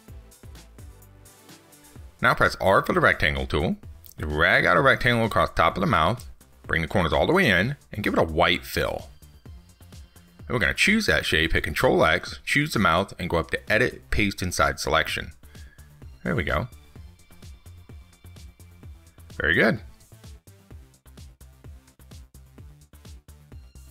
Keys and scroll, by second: 11.3 ctrl+x, 21.8 ctrl+s.